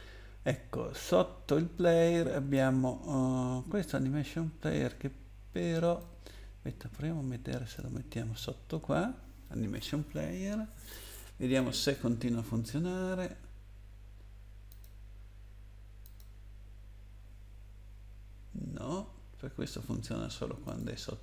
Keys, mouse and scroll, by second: 6.0 click, 11.5 click, 14.7 click, 16.0 click, 20.6 click.